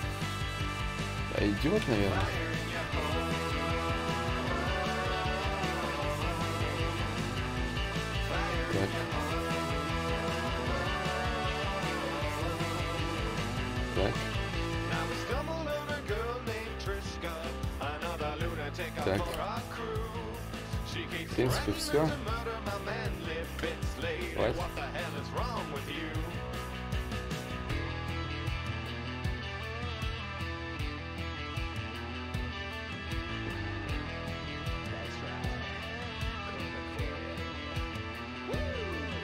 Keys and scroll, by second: 10.4 ctrl+z, 11.8 ctrl+z, 18.6 shift+d, 18.8 shift+d, 23.7 d, 24.1 d, 25.4 d, 32.2 z, 32.6 d, 34.6 d, 38.0 x.